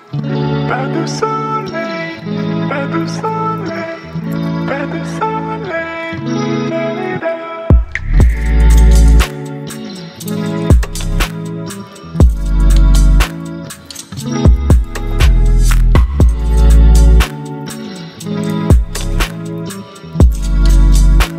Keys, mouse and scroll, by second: 2.4 v, 3.5 ctrl+t, 5.8-6.4 alt+drag, 18.1 b, 19.7 click.